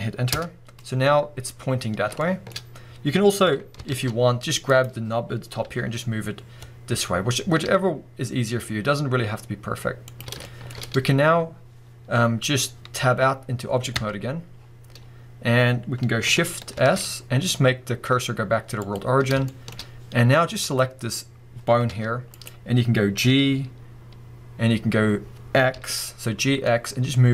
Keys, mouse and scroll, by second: 0.4 Return, 1.3-1.9 scroll up 2, 1.9 scroll down 2, 2.2-4.7 shift+middle drag, 3.9 ctrl+z, 4.7 click, 5.6 g, 10.2 shift+click, 10.4-18.9 shift+middle drag, 13.9 Tab, 14.5 scroll down 1, 15.0 scroll up 1, 16.7 shift+s, 18.9-19.5 drag, 19.5-20.6 shift+middle drag, 20.6 click, 21.9 g, 22.4 right click, 22.7-23.2 scroll up 1, 23.2 g.